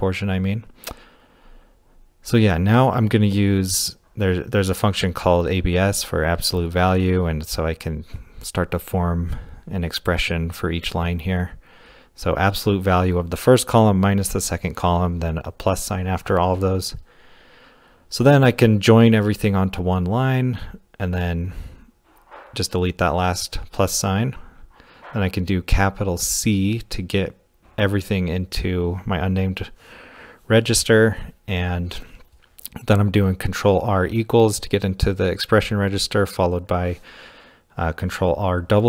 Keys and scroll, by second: 1.7-2.4 typing, 4.4-5.8 typing, 6.3 Right, 7.1-9.1 typing, 8.6 Right, 14.0 shift+=, 16.3 typing, 19.2 typing, 21.8 shift+j, 23.0-26.9 typing, 31.2 ctrl+r, 31.2-31.6 typing, 32.7 ctrl+r, 32.7-34.3 typing.